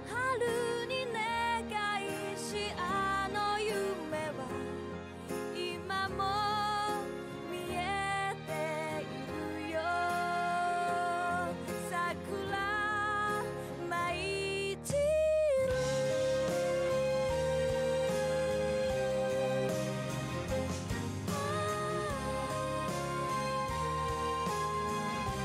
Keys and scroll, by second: 3.1 ctrl+z, 4.1 ctrl+z, 5.8 ctrl+z, 7.9 ctrl+z.